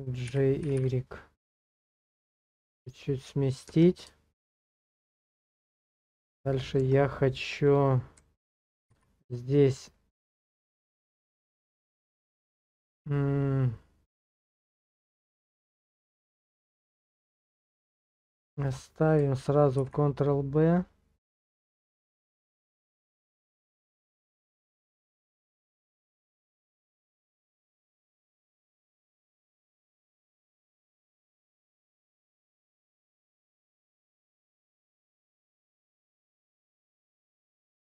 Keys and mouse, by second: 0.3 g, 0.6 y, 0.8 y, 3.2 click, 3.7 Tab, 5.7 click, 6.1 shift+click, 8.9 ctrl+b, 14.7 click, 16.0 ctrl+z.